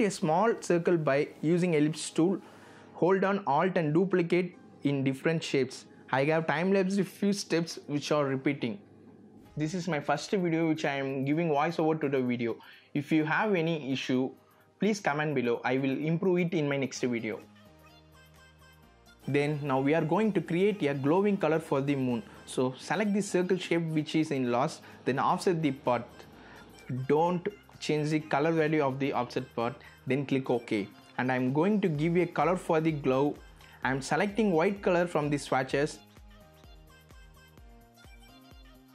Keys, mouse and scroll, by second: 2.9 shift+v, 3.2 click, 3.7-4.8 drag, 6.4 alt+click, 8.1 shift+click, 9.5 click, 10.5 shift+click, 11.4 click, 12.7 click, 13.4 alt+click, 18.1 click, 19.1-35.1 drag.